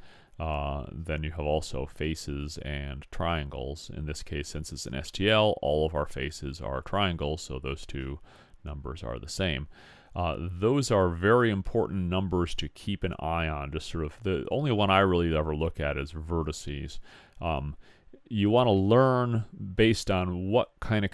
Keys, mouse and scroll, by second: 6.0-7.8 drag.